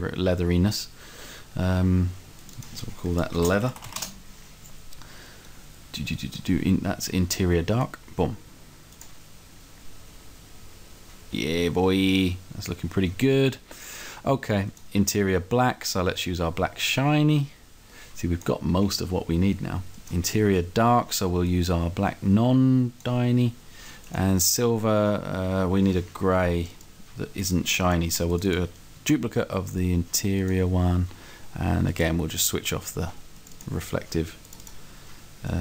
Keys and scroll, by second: 3.4-4.0 typing.